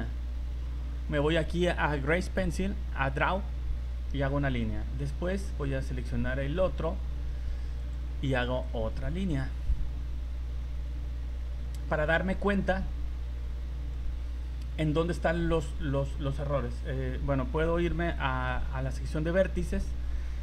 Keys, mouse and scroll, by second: 6.5 right click, 7.8 click, 18.5 v, 19.4 right click.